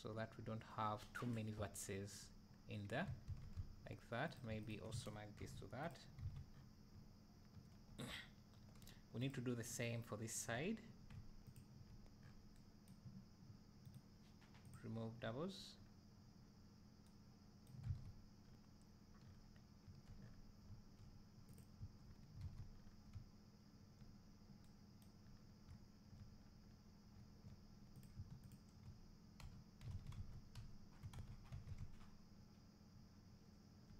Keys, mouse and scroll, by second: 1.2 middle click, 3.3 alt+a, 3.5 `, 4.3 click, 4.7 shift+drag, 6.2 alt+a, 6.5 scroll down 2, 9.3 click, 9.7 scroll down 1, 10.5-11.1 scroll up 1, 13.5 e, 15.2 e, 17.9 alt+a, 17.9-21.6 right drag, 18.4-19.3 scroll down 2, 19.3-19.9 scroll down 1, 20.3-20.7 scroll up 2, 21.6 click, 22.5 alt+a, 22.8-23.2 scroll down 2, 23.2 `, 24.4 scroll up 2, 25.3 scroll up 1, 25.7 `, 26.5 scroll down 1, 27.2 `, 28.1 click, 28.6 shift+click, 29.5 j, 30.1 alt+a, 30.2 Tab, 30.7 `, 31.5 Tab, 32.7-33.9 middle drag.